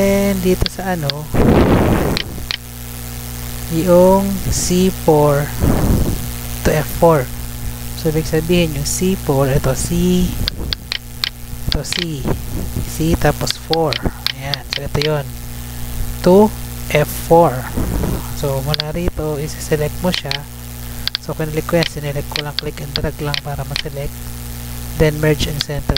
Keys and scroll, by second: 2.7 ctrl+c, 7.9 Tab, 16.9 Tab, 18.1 Tab.